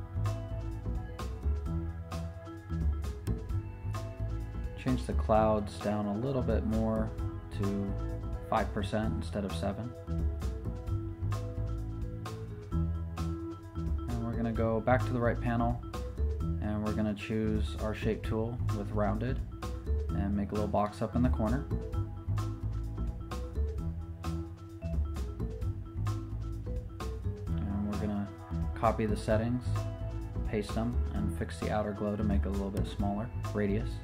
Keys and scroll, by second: 7.0 5, 7.2 Return, 10.6 5, 11.1 Return, 21.1 super+z, 25.6 v.